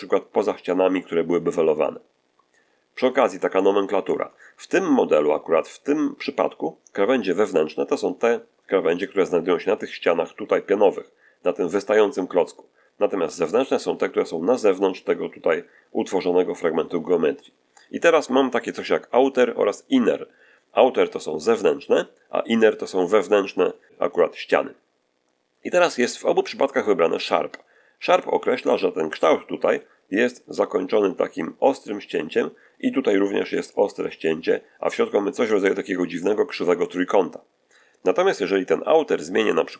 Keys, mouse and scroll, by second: 3.4 shift+middle click, 39.3 click.